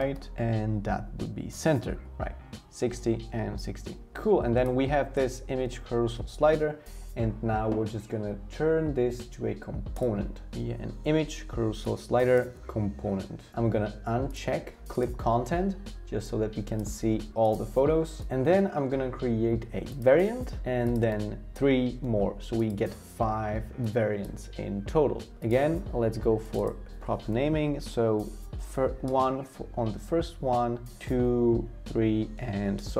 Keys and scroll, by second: 0.0 Right, 0.1 Right, 28.6 1, 29.1 Return, 31.0 2, 31.1 Return, 32.6-32.9 typing, 32.8 Return.